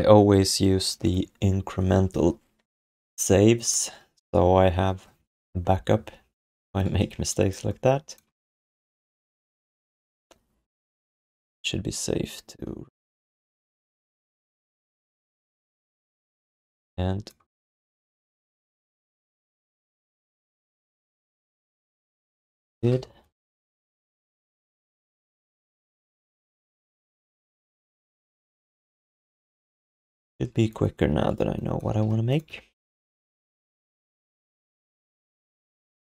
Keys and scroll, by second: 15.1 f, 16.4 alt+q, 21.7 q, 27.5 q, 28.2 alt+shift+d, 28.4 ctrl+s, 29.7 alt+q, 31.0 alt+q, 31.6-32.5 typing, 34.0 d.